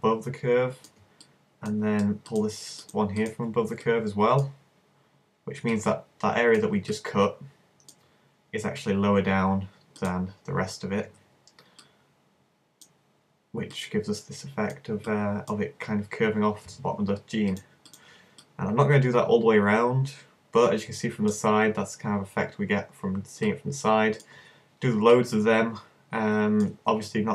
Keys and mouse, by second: 1.6-3.8 middle drag, 7.0-8.2 middle drag, 10.0-11.8 middle drag, 11.8-13.6 drag, 13.8-15.0 drag, 15.0-17.0 middle drag, 18.0 click, 18.5 middle click, 20.7-22.6 middle drag.